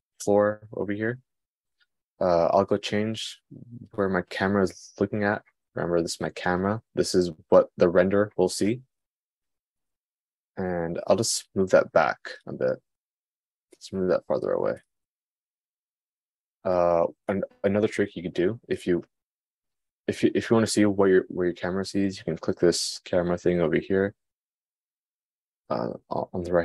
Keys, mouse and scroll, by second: 4.6 click, 12.2 g, 13.8 g.